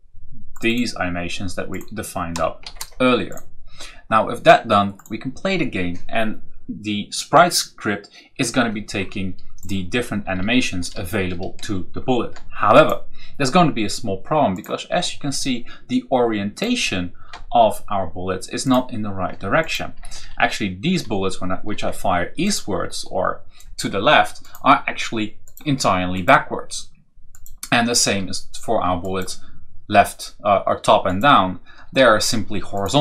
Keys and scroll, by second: 2.5 shift+o, 10.1 Down, 10.2 Left, 12.6 Left, 16.7 Right, 17.2 Down, 18.5 Down, 18.6 Down, 19.4 Down, 19.9 Right, 22.3 Right, 28.0 Down, 29.8 Up, 31.8 Down, 32.7 Down.